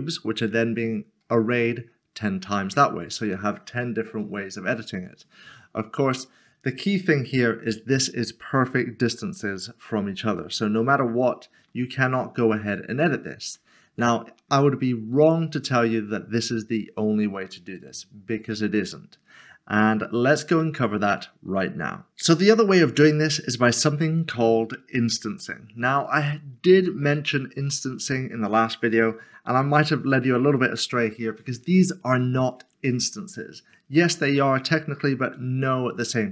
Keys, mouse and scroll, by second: 8.2 middle click, 10.4 shift+middle click, 13.5 Tab, 15.2-15.6 scroll down 1, 18.4 scroll down 1, 19.0 scroll up 1, 20.6 scroll up 1, 20.8 middle click, 22.2 middle click, 26.5 scroll up 1, 27.1 scroll up 1, 27.3 middle click.